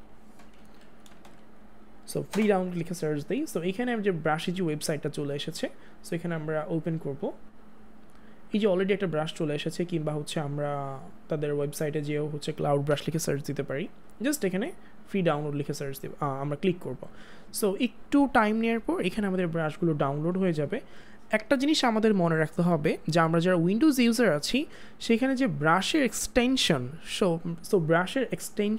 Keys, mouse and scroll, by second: 0.9 Down, 1.1 space, 2.0 Down, 2.3 Return.